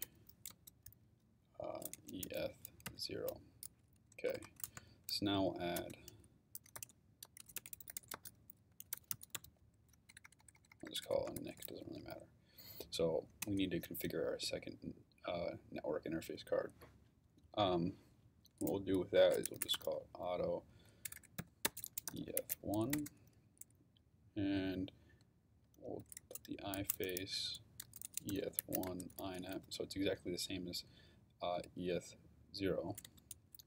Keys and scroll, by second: 0.0-0.5 typing, 1.7-2.9 typing, 4.3 Return, 4.8 shift+Return, 4.9-10.1 typing, 11.1-12.2 typing, 13.4 Return, 19.2-22.9 typing, 22.9 Return, 25.8-30.0 typing, 33.0-33.6 typing.